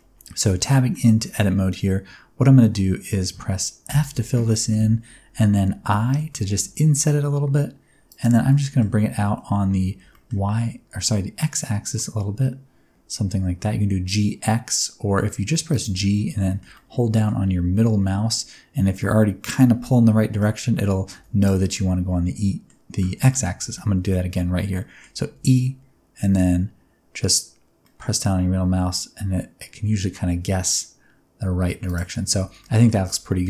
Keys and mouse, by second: 0.8 middle click, 3.8 f, 4.4 middle click, 5.8 i, 8.0 click, 8.3 alt+z, 8.7 middle click, 9.2 alt+z, 9.9 g, 10.1 middle click, 15.6 click, 16.4 shift+middle click, 16.7 middle click, 17.8 middle click, 20.1 middle click, 21.1 1, 21.7 middle click, 23.2 middle click, 23.7 middle click, 24.7 middle click, 25.3 e, 27.8 middle click, 31.8 click, 32.2 middle click, 32.5 Tab, 32.5 middle click, 33.0-33.4 middle drag.